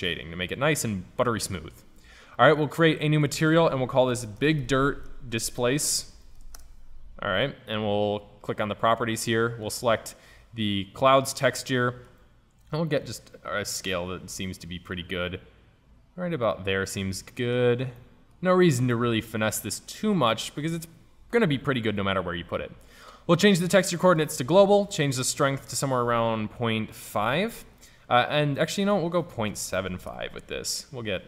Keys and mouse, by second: 2.6-5.1 drag, 8.6-11.5 drag, 11.5-13.1 middle drag, 13.1-15.0 drag, 17.4-17.9 middle drag, 21.5-27.4 drag, 28.9-30.9 drag.